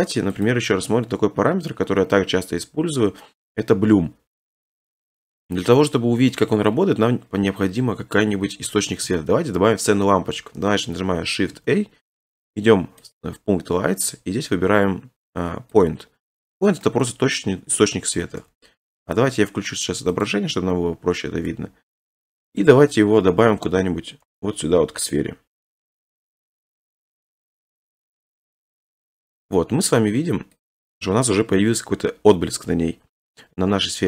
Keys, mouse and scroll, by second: 0.4 click, 2.1 middle click, 2.2 middle click, 2.2 scroll, 3.3-4.4 scroll, 4.6-5.0 scroll, 6.3-6.8 scroll, 7.5 scroll, 8.5-9.0 scroll down 2, 11.5 a, 13.1 click, 15.8 click, 17.8 middle click, 18.2 g, 18.4 z, 19.2 click, 20.2 click, 21.3 g, 21.5 z, 22.6 click, 23.1 7, 24.2 g, 25.9 click, 27.4 scroll, 28.3 click, 29.6 scroll, 30.6 click, 30.9-31.3 scroll, 32.5-33.0 scroll.